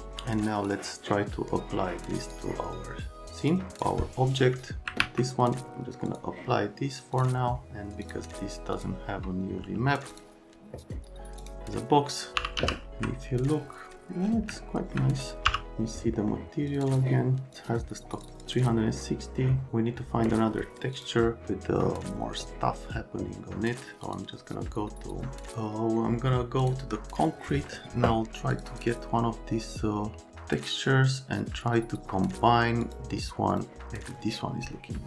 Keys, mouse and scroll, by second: 0.6 click, 3.4 click, 3.7 click, 5.0 alt+q, 5.4 middle click, 6.1 middle click, 7.1 middle click, 8.0 click, 8.7 click, 10.1 click, 11.4 click, 12.1-13.1 typing, 15.4 m, 16.2 click, 16.7 click, 16.8 click, 18.1 click, 18.3 click, 18.6 click, 20.9 click, 24.0 click, 26.6 click, 28.5 click, 28.7 click, 32.8 click, 33.5 click.